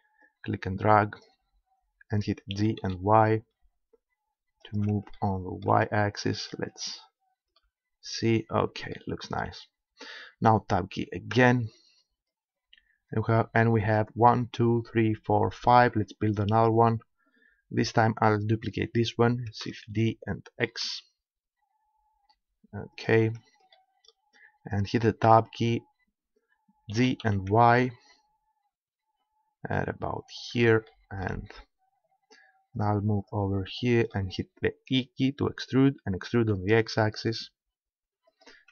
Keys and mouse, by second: 2.5 g, 4.8 click, 6.5 middle click, 11.3 Tab, 15.8-19.9 middle drag, 19.9 shift+d, 23.1-25.1 drag, 25.3 Tab, 26.9 g, 30.4-31.8 drag, 32.1-35.2 middle drag, 34.9 e, 38.4 click.